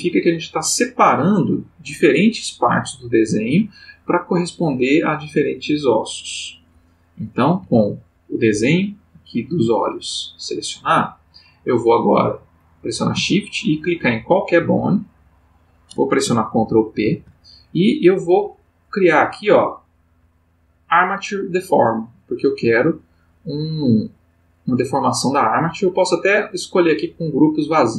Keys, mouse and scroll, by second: 7.6 g, 9.7 Escape, 15.2 shift+click, 16.9 ctrl+p, 18.3 Up, 25.6 Down.